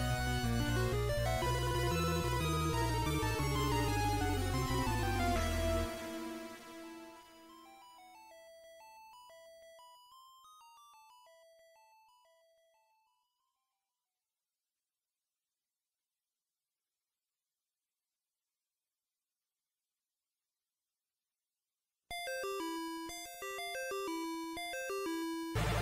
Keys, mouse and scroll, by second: 0.4 b, 7.6 h, 9.6 KP_1, 11.2 scroll up 2, 13.0 z, 14.2 right click, 15.0 shift+right click, 16.4 shift+right click, 17.8 shift+right click, 20.8 x, 24.6 click, 25.3 shift+a.